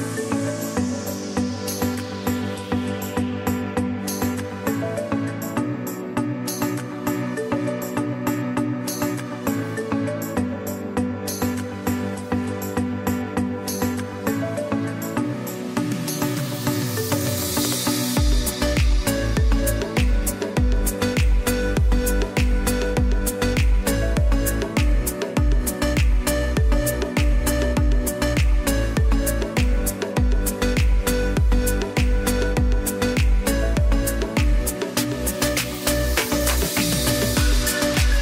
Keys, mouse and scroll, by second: 1.1 ctrl+g, 2.3 ctrl+alt+shift+e, 3.3 click, 12.4 click, 14.0 space, 14.2 click, 14.7 space, 15.0 b, 16.1 click, 16.2 typing, 18.0 right click, 18.6 click, 19.7 ], 19.9 click, 22.0-22.8 typing, 23.7 click, 25.6 z, 25.8 click, 30.1 space, 30.5 click, 32.5-35.3 typing, 32.7 click, 33.5 click, 34.4 click, 34.8 click, 37.6 ctrl+click, 38.0 ctrl+e.